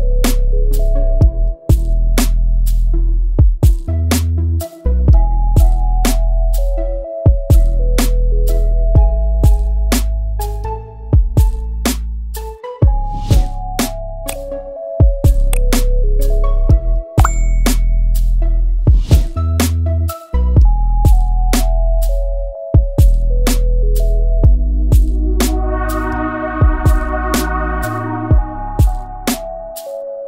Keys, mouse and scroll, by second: 1.0-1.4 scroll up 1, 1.4 click, 1.9 scroll down 2, 2.1-5.6 middle drag, 5.6 click, 6.2 click, 6.4 Tab, 7.8 click, 8.7 scroll up 1, 8.9 middle click, 9.2 scroll down 1, 9.4 shift+middle click, 9.9-11.0 scroll up 1, 11.0 click, 12.4 Tab, 12.7-13.3 scroll down 2, 13.0 alt+a, 13.3-14.8 middle drag, 14.8 KP_1, 15.5-15.9 scroll up 3, 15.9 click, 16.2 scroll up 1, 16.3 ctrl+s, 18.6-19.0 scroll up 1, 19.0-22.2 shift+middle drag, 22.2 Tab, 22.7 Tab, 22.9 click, 23.0 Tab, 24.3 click, 29.0-30.2 drag.